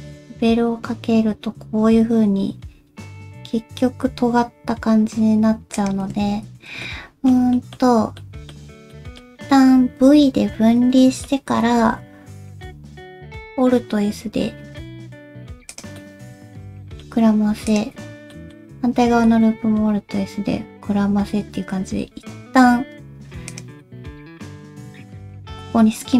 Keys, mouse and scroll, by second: 6.3 ctrl+z, 6.8 middle click, 7.5 middle click, 8.2 middle click, 8.9 middle click, 10.0 v, 11.0 middle click, 11.8 alt+s, 16.0 middle click, 17.7 alt+click, 18.3 middle click, 19.1 alt+s, 23.8 middle click.